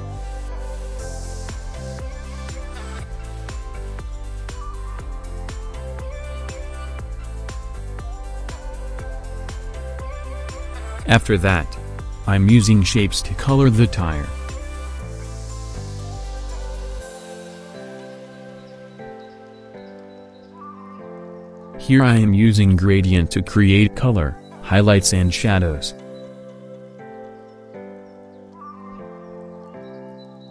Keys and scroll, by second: 3.8 ctrl+alt+shift+z, 25.0 ctrl+z, 26.8 v.